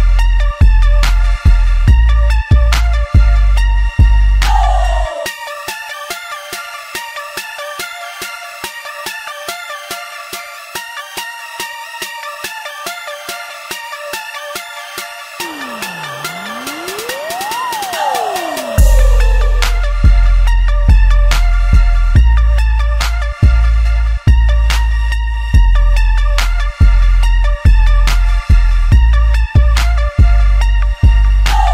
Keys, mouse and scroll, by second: 2.9 shift+click, 3.7 3, 3.9 click, 4.3 middle click, 5.2 shift+click, 6.0 shift+click, 6.4 middle click, 7.2 shift+click, 7.5 x, 8.3-11.2 middle drag, 11.2 1, 11.3 click, 12.1 shift+click, 12.6 middle click, 13.4 ctrl+z, 14.4 shift+click, 15.1 shift+click, 15.6-16.7 shift+middle drag, 16.7 shift+click, 17.3 shift+click, 18.1 ctrl+middle click, 18.5 z, 19.0-20.2 shift+middle drag, 20.2 ctrl+shift+b, 22.9 Tab, 23.3-24.5 middle drag, 24.5 z, 24.9-26.2 shift+middle drag, 26.2 shift+a, 28.5 click, 29.5-31.7 drag.